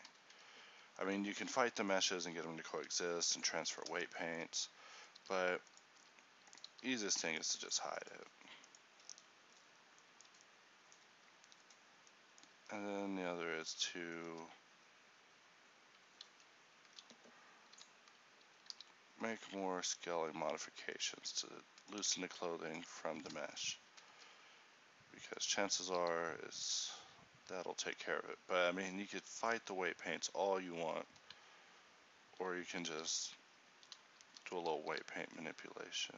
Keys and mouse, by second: 2.9-5.3 drag, 2.9 h, 5.3-8.2 typing, 11.7-15.9 right drag, 12.7 Tab, 16.4 alt+s, 17.9 o, 18.8 alt+s, 22.2 Tab, 23.1 a, 26.1 g, 33.1 alt+g, 34.4 alt+r, 35.1 g.